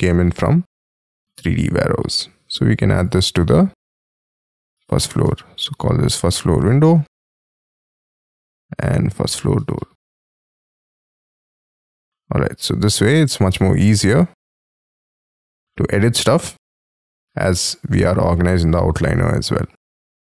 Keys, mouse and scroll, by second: 1.5 double click, 4.3-7.8 typing, 8.1-9.0 scroll up 3, 9.0 double click, 9.3-11.3 typing.